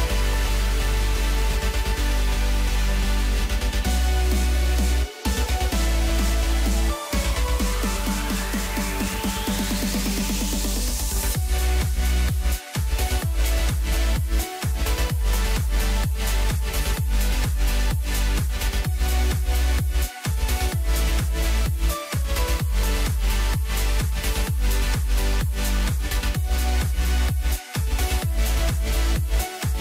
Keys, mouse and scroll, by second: 0.7 g, 2.5 s, 6.3 KP_3, 7.1-7.4 scroll up 1, 7.8 g, 11.0 r, 15.1 g, 17.8 click, 18.0-19.6 middle drag, 19.6 scroll up 1, 19.9-21.0 middle drag, 21.0 g, 23.1 r, 25.2 KP_1, 27.3-29.0 middle drag, 29.0 KP_3.